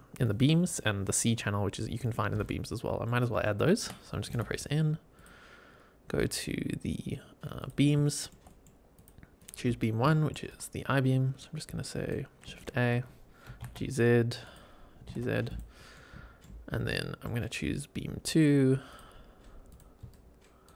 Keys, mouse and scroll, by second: 2.4-3.0 middle drag, 2.4 click, 3.3-3.7 shift+middle drag, 4.2 n, 5.1-7.6 drag, 7.9 shift+middle drag, 8.4 middle click, 8.9-9.4 drag, 9.7 scroll up 1, 10.0 shift+middle drag, 10.4 shift+right click, 12.4 shift+a, 13.4 g, 13.6 z, 14.4 click, 14.9 g, 15.0 z, 15.4 click, 15.8-16.3 middle drag, 16.6 scroll down 1, 16.8-17.2 middle drag, 18.8-19.7 drag, 20.0 shift+right click.